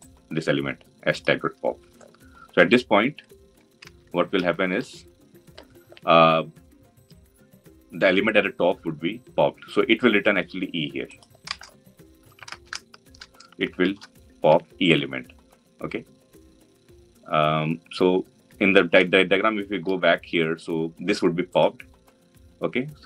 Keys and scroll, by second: 3.6 ctrl+alt+Left.